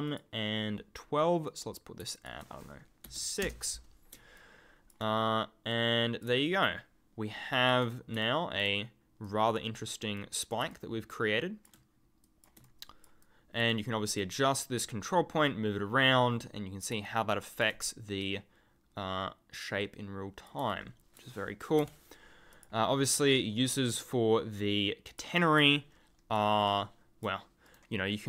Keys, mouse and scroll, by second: 0.0 click, 1.4 click, 2.1 ctrl+click, 3.0 6, 3.4 Return, 4.3 ctrl+click, 4.8-5.7 ctrl+scroll up 1, 5.7 click, 6.4 ctrl+click, 8.2 ctrl+click, 8.4 ctrl+scroll down 1, 8.5-9.2 ctrl+scroll, 9.2 click, 10.7 ctrl+click, 12.6 ctrl+click, 13.5 ctrl+scroll down 1, 13.6 ctrl+scroll up 1, 14.2 click, 17.0 ctrl+click, 20.7 ctrl+click, 20.8-21.7 ctrl+scroll up 1, 21.8 Delete, 22.5 click, 25.1 click, 25.7 ctrl+click, 25.9 ctrl+scroll down 1, 26.0-26.6 ctrl+scroll, 26.7-27.6 ctrl+scroll up 1, 27.6 right click.